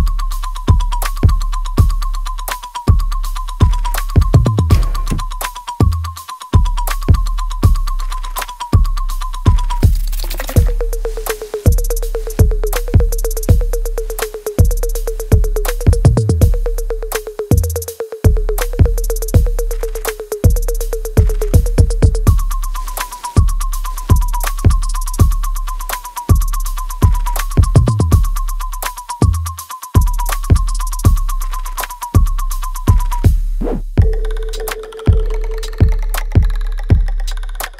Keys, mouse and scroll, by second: 2.7 alt+right click, 3.1 alt+click, 3.5 alt+middle click, 3.9 alt+right click, 5.0-10.2 ctrl+drag, 10.2-11.7 alt+right drag, 11.7-21.7 ctrl+drag, 21.8 right click, 22.3 click, 22.6 alt+right click, 24.0 click, 24.4 alt+click, 25.2 alt+middle click, 25.7 alt+right click, 26.2 alt+click, 27.5 alt+middle click, 28.0-29.3 alt+drag, 29.3 alt+right click, 29.8 alt+middle click, 30.5 alt+click, 30.9 alt+middle click, 31.3 click, 33.0 ctrl+s, 33.6 alt+click, 34.2 alt+middle click, 34.8 alt+click, 35.4 alt+middle click, 36.1-37.7 alt+drag.